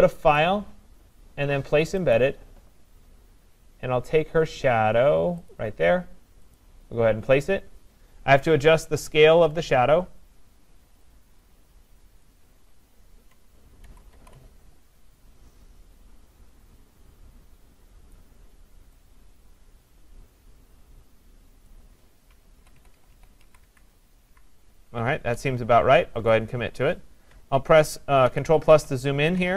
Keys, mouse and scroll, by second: 1.2 click, 2.1 click, 6.6 click, 8.4-10.2 scroll, 12.3 click, 12.6-13.4 scroll, 13.9 ctrl+-, 14.1 ctrl+-, 18.1 click, 20.2 click, 21.7 click, 22.6 Right, 22.8 Right, 23.1 Right, 24.3 Up, 26.4 click, 28.3 ctrl+=, 28.7 ctrl+=.